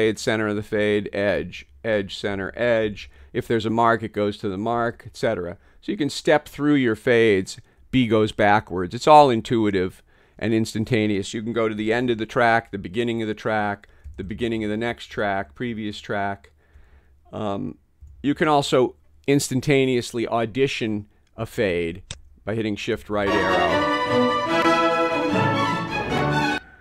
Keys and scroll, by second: 0.0-2.9 typing, 4.8-6.2 typing, 7.8-9.8 typing, 12.0 alt+super+Right, 12.7 alt+super+Left, 14.7 alt+super+Down, 15.2 alt+super+Up, 18.1 a, 26.5 space.